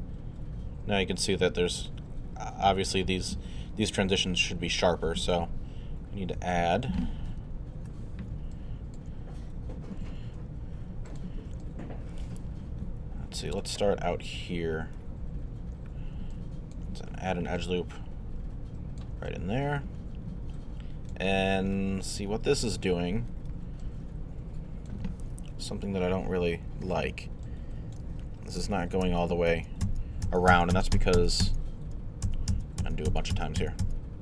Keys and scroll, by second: 7.3 alt+2, 7.8 1, 8.3 alt+1, 25.5 alt+2, 26.2 1, 26.9 alt+1, 28.6 alt+z, 30.5 z, 31.2 z, 32.2 z, 32.8 z, 33.3 z.